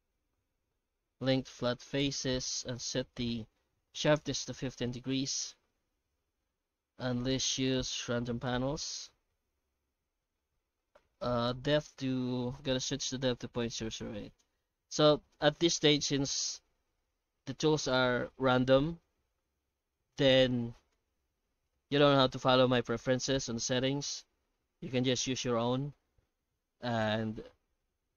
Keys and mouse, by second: 2.2 F9, 5.7 Tab, 6.8 shift+q, 13.8 KP_0.